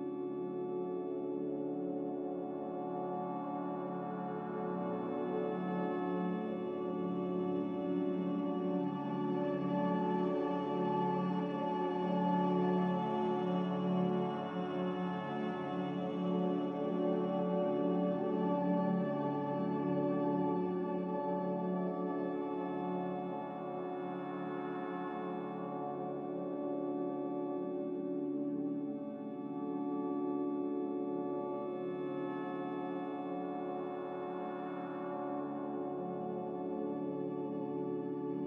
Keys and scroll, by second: 13.1 s, 25.8 z, 26.6 x, 28.9-29.6 typing, 31.4-33.2 typing, 35.2 ctrl+z.